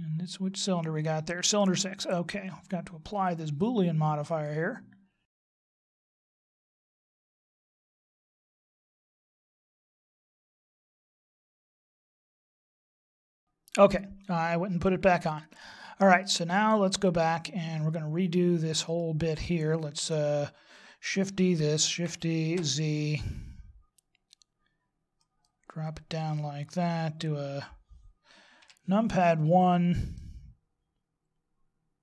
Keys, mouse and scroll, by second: 0.2 right click, 2.0 right click, 4.3 click, 6.0 click, 6.6 ctrl+z, 6.8 middle click, 7.2 right click, 7.3 KP_1, 7.4-7.9 scroll up 5, 7.5 shift+middle click, 7.9 shift+middle click, 8.6 click, 9.0 right click, 9.2 click, 9.4 click, 10.1 click, 10.6 click, 11.4 right click, 11.7 g, 12.5 x, 12.7 middle click, 12.9 scroll down 3, 13.0 middle click, 15.7 middle click, 17.3 middle click, 20.2 right click, 21.9 shift+d, 28.6 KP_1, 29.4-30.1 scroll up 4, 30.1 middle click.